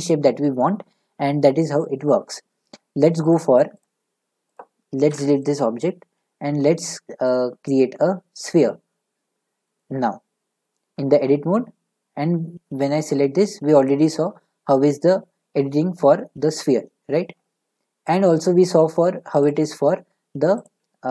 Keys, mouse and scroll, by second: 3.4 click, 3.8 click, 4.6 click, 5.1 Delete, 5.7 a, 8.4 click, 10.8 Tab, 12.7 a, 15.0-18.1 drag, 18.1-19.3 drag, 20.0 Tab, 20.6 click.